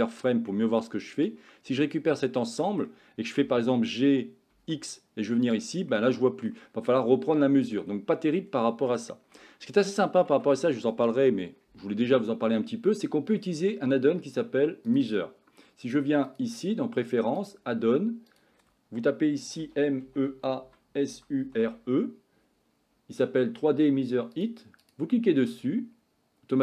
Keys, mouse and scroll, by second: 0.5 middle click, 1.4 click, 2.3 middle click, 3.4 g, 5.9 middle click, 9.0 shift+middle click, 10.4 Tab, 12.9 middle click, 15.0-16.6 drag.